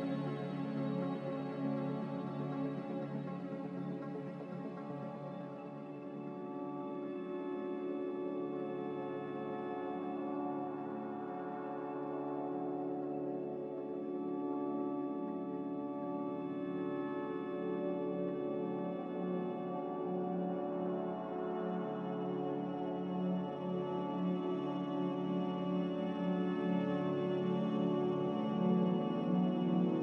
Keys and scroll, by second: 12.4 x, 19.0 z.